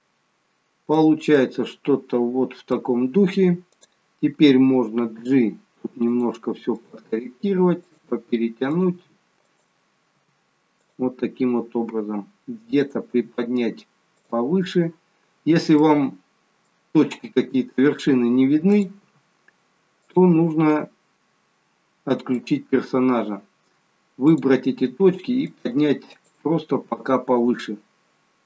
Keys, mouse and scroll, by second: 0.0 middle click, 0.0-0.6 scroll up 2, 1.4 middle click, 3.7 click, 5.2 g, 6.8 click, 7.1 g, 8.7 click, 9.1 g, 11.8 g, 12.8 click, 13.1 g, 15.9 middle click, 18.7 click, 19.0 g, 21.1-21.7 scroll down 2, 22.4 click, 24.9 click, 24.9 g, 26.1 click, 26.8 g.